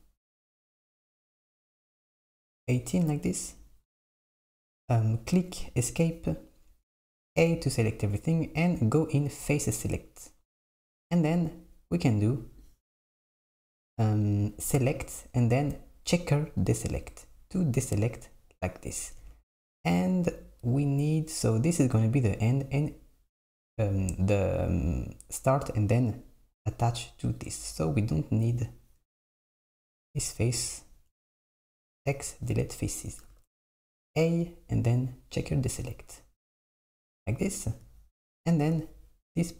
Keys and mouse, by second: 7.4 a, 9.4-12.5 drag, 14.3-17.3 drag, 27.4 click, 29.6 click, 30.5 x, 33.3 a, 34.4-37.4 drag.